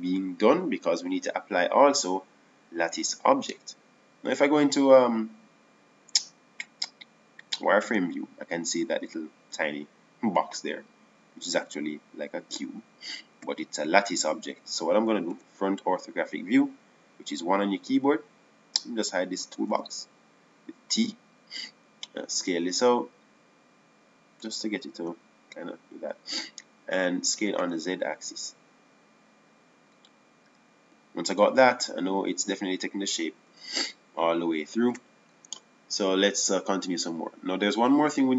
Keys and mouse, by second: 3.1-6.4 drag, 9.8 z, 13.6-14.9 middle drag, 22.3 t, 24.0 s, 28.8 s, 37.3 click, 37.3 KP_1.